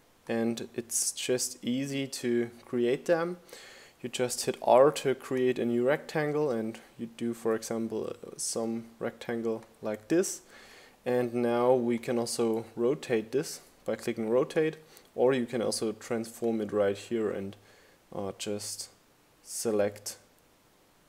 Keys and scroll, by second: 3.9 r.